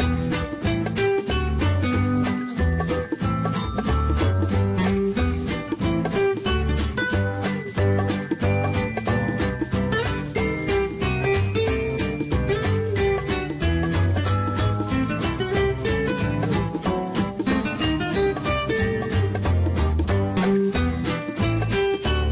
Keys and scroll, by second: 0.0 Escape, 2.5 Delete, 3.2 Escape, 4.7 Delete, 8.8 2, 9.1 Return, 17.1-18.8 typing.